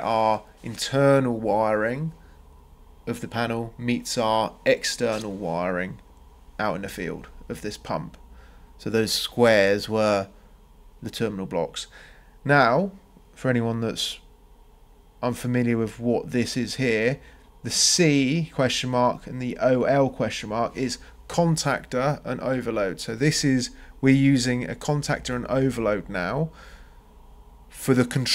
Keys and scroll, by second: 2.8 Escape, 20.1 ctrl+c, 20.4 ctrl+v.